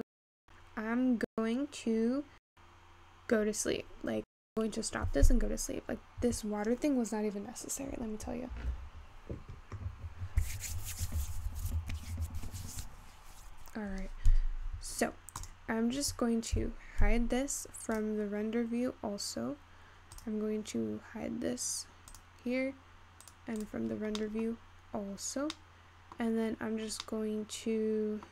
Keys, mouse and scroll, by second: 7.4 Escape, 14.7-15.4 scroll up 3, 15.4 click, 15.9-16.6 scroll down 3, 16.6 h, 18.4 drag, 18.9-19.7 scroll up 5, 20.2 click, 22.2 click, 23.3 click, 23.7 click, 24.2-24.7 middle drag, 24.7-25.1 scroll up 4, 25.1-26.0 scroll down 5, 26.0 middle click, 27.5-28.3 middle drag.